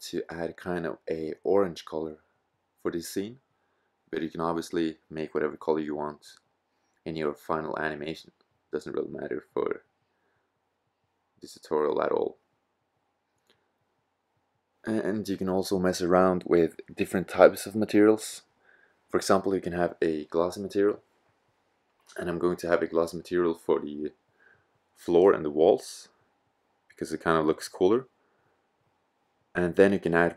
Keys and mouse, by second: 19.5-20.7 drag, 20.7 middle click, 25.8 middle click, 25.8 click, 26.0 middle click, 26.3 middle click.